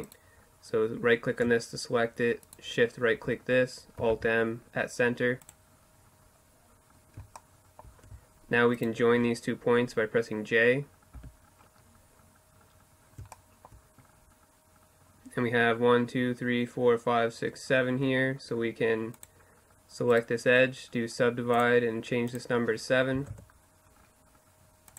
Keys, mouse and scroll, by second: 1.5-3.3 right drag, 3.1 alt+m, 5.7 middle click, 7.8-9.6 right drag, 10.2 j, 18.2 click, 19.1-21.3 middle drag, 21.3-22.9 drag, 23.9-24.9 drag, 24.4-24.9 right drag.